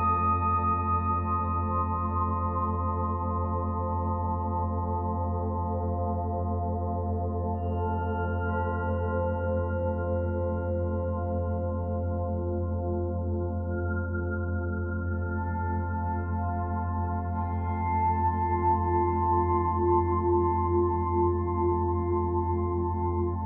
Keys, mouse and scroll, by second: 0.9 click, 2.3-3.4 shift+middle drag, 3.4 scroll down 5, 3.6 b, 4.1 o, 8.5-9.0 scroll up 8, 9.0 Tab, 9.4 middle click, 10.3 click, 10.6 l, 12.0 alt+n, 14.3 alt+n, 14.9 o, 16.7 alt+scroll up 1, 16.9 alt+n, 17.9 scroll down 3, 18.0 Tab, 18.2-18.5 middle drag, 18.5 b, 19.0 o, 21.6 o, 22.7 ctrl+s.